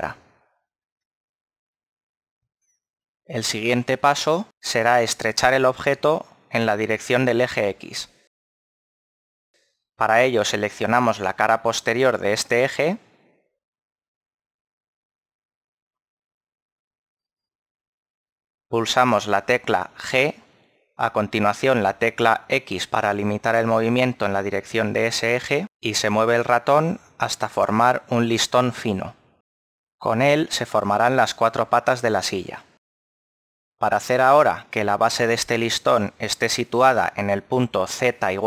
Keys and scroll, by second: 21.0 g, 21.5 x.